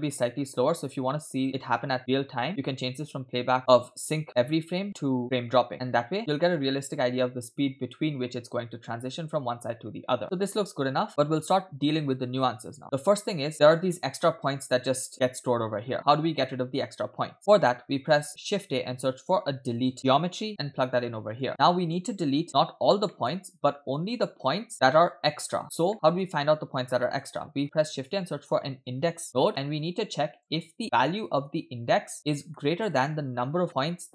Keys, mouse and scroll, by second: 0.7 space, 2.5-6.2 drag, 6.2 space, 13.3 space, 13.5 middle click, 13.5-14.1 scroll up 3, 14.3 space, 14.5 space, 16.1-16.5 scroll down 2, 16.5 middle click, 17.2-17.5 scroll down 4, 17.5 middle click, 17.8-18.1 scroll up 3, 18.1 middle click, 18.4 shift+a, 21.5 click, 22.2-23.0 scroll up 4, 22.5 middle click, 23.1 middle click, 23.3-23.9 scroll up 2, 23.9 scroll up 1, 24.0-25.6 drag, 25.7 scroll down 2, 25.9 middle click, 27.0 middle click, 27.5 shift+a, 30.8-32.2 drag, 32.3 scroll down 2, 32.5 middle click, 33.7 middle click.